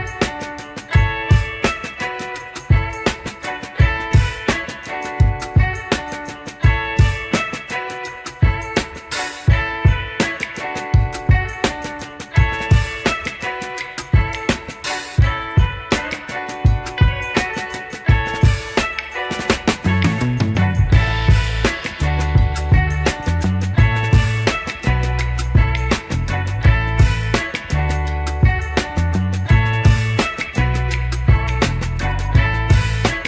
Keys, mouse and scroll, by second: 0.5 click, 1.3 click, 6.8 click, 7.8 click, 9.0-10.4 drag, 11.4-13.6 drag, 14.6 click, 15.4 click, 17.4 click, 17.8 click, 18.0 Tab, 19.7 click, 20.3 shift+middle click, 21.7-23.5 drag, 23.9-24.5 scroll up 3, 24.1 shift+middle click, 24.7 scroll up 2, 25.7 shift+click, 27.5 click, 28.3 click, 28.8 Tab, 30.1 click, 30.6 scroll down 2, 30.8 shift+middle drag.